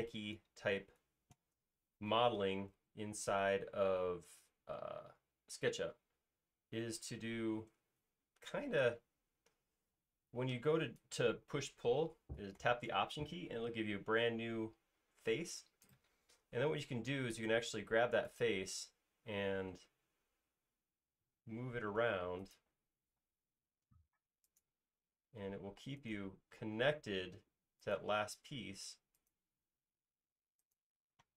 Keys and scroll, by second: 1.1 space, 10.3 p, 20.0 Right, 20.6 Left, 23.3 q, 25.9 space, 26.5 q.